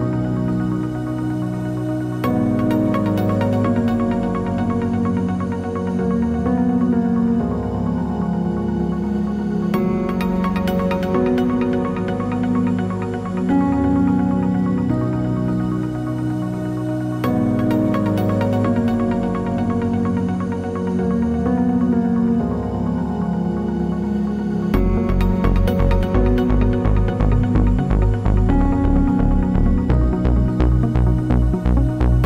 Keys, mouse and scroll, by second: 0.7 click, 1.8 click, 2.3 alt+d, 3.9 click, 3.9 g, 4.5 click, 4.7 r, 5.4 click, 5.5 g, 6.1 click, 6.4 alt+d, 7.1 click, 7.3 r, 8.6 click, 8.7 g, 10.4 click, 10.7 click, 11.0-12.4 middle drag, 12.4 click, 12.8 h, 13.0-17.3 middle drag, 13.3 scroll down 1, 17.3 click, 18.0 click, 18.5 scroll up 1, 20.3 alt+d, 20.3-23.1 middle drag, 21.4 r, 23.1 click, 23.5-25.5 middle drag, 24.7 alt+d, 25.5 click, 26.2-28.1 middle drag, 26.2 r, 28.4 click, 28.7-32.2 middle drag, 29.5 scroll down 1.